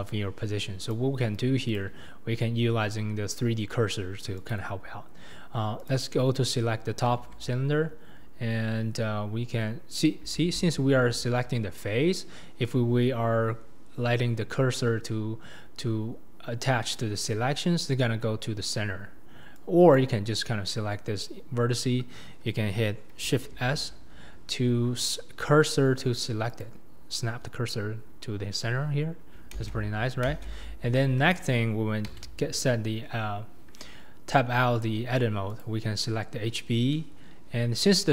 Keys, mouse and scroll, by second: 0.0 click, 0.8 click, 1.7 click, 4.4 click, 5.8 click, 7.2 Tab, 8.1-10.3 scroll up 2, 10.3 scroll up 1, 10.4 alt+z, 19.6 click, 23.5 shift+s, 29.6 ctrl+space, 30.3 ctrl+space, 32.2 Tab, 33.5-34.9 scroll down 2, 34.9 scroll down 1, 35.0-35.6 scroll up 1, 35.6 click, 37.6-38.1 scroll up 1.